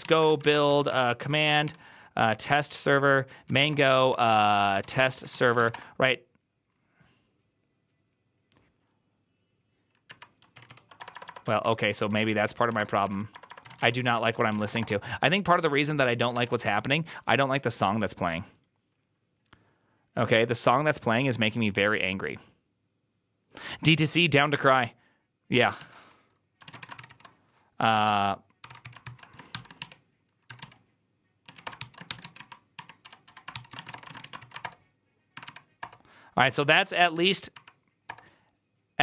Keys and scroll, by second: 0.0-6.1 typing, 1.5 Tab, 10.4 Up, 10.4 ctrl+w, 10.5 ctrl+w, 10.8 BackSpace, 11.0 BackSpace, 11.1 BackSpace, 11.4 ctrl+Left, 11.6 ctrl+Left, 11.8 ctrl+Left, 12.0 ctrl+Left, 12.2-16.5 typing, 26.5 ctrl+a, 26.7-36.9 typing, 26.8 ctrl+c, 26.9 ctrl+c, 35.2 Up, 35.6 Return, 36.4 Up, 37.4 ctrl+c, 37.4 Up, 37.4 Return, 37.9 Return.